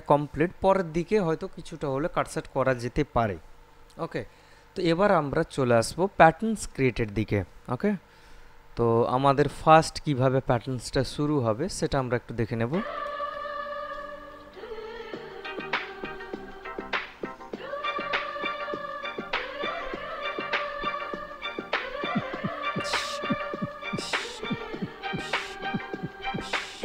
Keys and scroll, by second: 13.0 space.